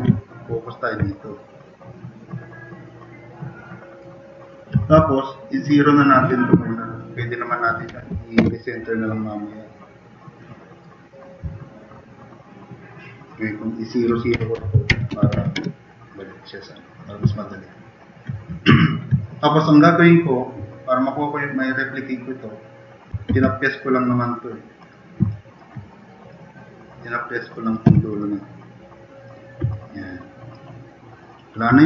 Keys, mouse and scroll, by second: 1.5-2.0 drag, 2.7-4.0 drag, 4.3 right click, 5.7 click, 7.9 0, 8.4 Return, 11.5 typing, 14.6 Tab, 15.1 Tab, 15.6 Return, 17.5 click, 18.8 click, 22.9-23.8 typing, 25.2-25.6 drag, 27.5 click, 27.9 f, 28.1 click, 29.7-30.4 drag, 30.6-31.2 drag, 31.4 drag.